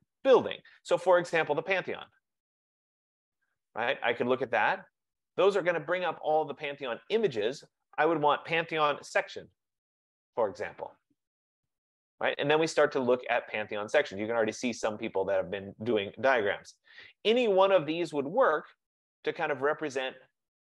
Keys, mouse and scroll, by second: 1.9-3.5 typing, 2.1 click, 8.0-10.2 drag, 8.6-10.4 typing.